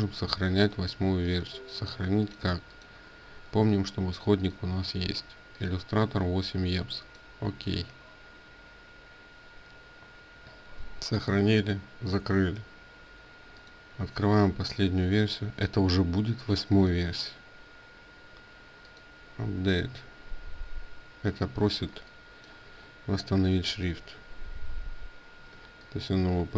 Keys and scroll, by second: 10.9 ctrl+w, 23.4 ctrl+a, 25.3 ctrl+space, 25.3 ctrl+a.